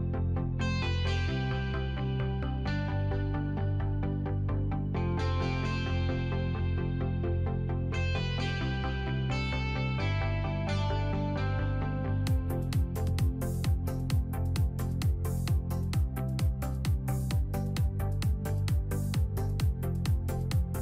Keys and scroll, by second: 2.2 alt+x.